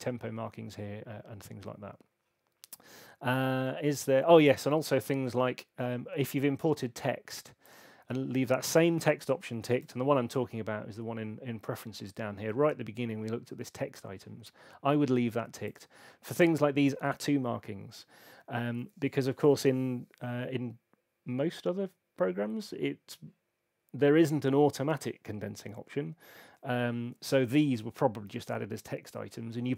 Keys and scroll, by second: 9.7 super+,.